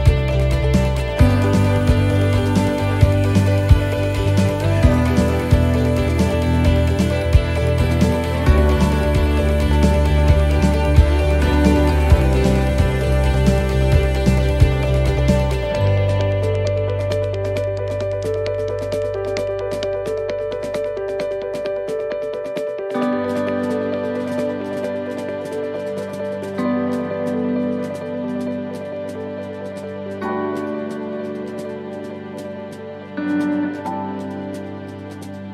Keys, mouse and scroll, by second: 0.5 shift+middle click, 1.0 middle click, 1.9 shift+middle click, 2.1 shift+middle click, 4.0-4.4 scroll down 1, 4.5 shift+middle click, 8.3 right click, 10.0 right click, 10.3 shift+right click, 10.7 shift+right click, 12.6 shift+right click, 14.3 click, 16.3 right click, 24.4 l, 24.4 x, 25.9 right click, 26.7 l, 27.7 x, 31.2 shift+middle click, 31.9-32.5 scroll up 4, 32.5 shift+middle click, 33.6 click, 35.1 click.